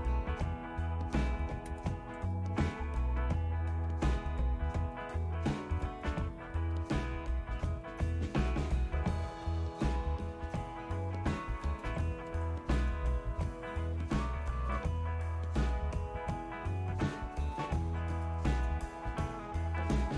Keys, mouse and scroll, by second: 7.1 ctrl++, 7.5 ctrl++, 9.6 ctrl+-, 10.1 ctrl+-, 11.1-12.2 typing, 12.9 Return, 15.4-20.1 right drag.